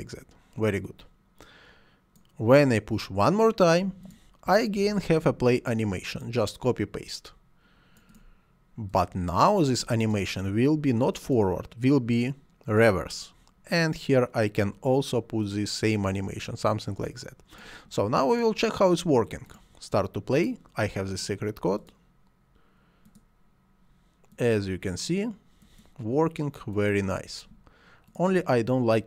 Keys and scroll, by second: 4.7 ctrl+c, 5.0 ctrl+v.